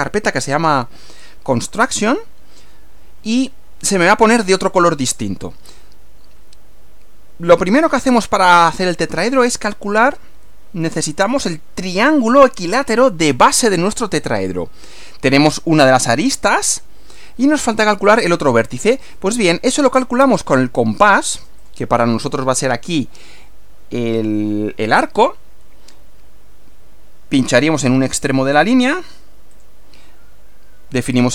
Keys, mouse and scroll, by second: 21.6 click, 28.2 click, 29.5 click.